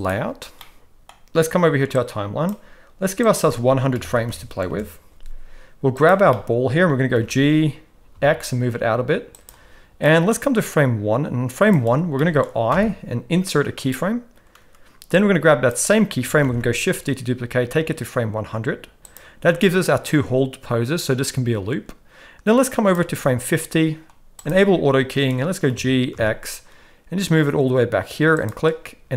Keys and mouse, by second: 0.0 click, 0.6-1.1 middle drag, 1.9 click, 3.2-4.7 drag, 4.2 0, 6.0 click, 6.3-6.8 middle drag, 7.1 g, 10.1 middle click, 10.6-11.7 drag, 12.2 middle click, 12.7 i, 15.2 click, 16.5 shift+d, 19.9-23.0 drag, 24.4 click, 25.7 g.